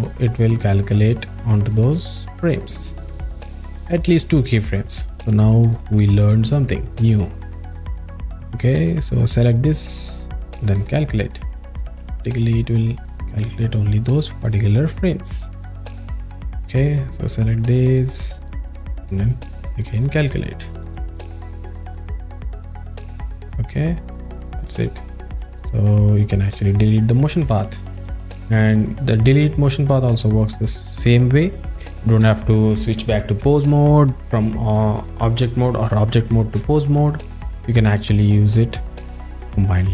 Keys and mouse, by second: 0.3 alt+middle click, 1.9 click, 7.0 ctrl+z, 8.5 click, 8.9 click, 9.0 click, 10.7 click, 12.4 click, 16.7 click, 17.2 click, 17.3 click, 19.1 click, 20.7 click, 24.6 click, 24.7 a, 26.8 click.